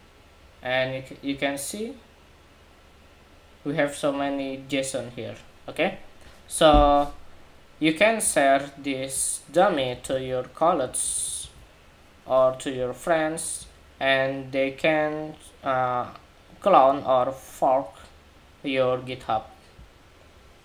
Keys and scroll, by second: 9.6 super+c, 10.9 super+a, 11.1 super+c.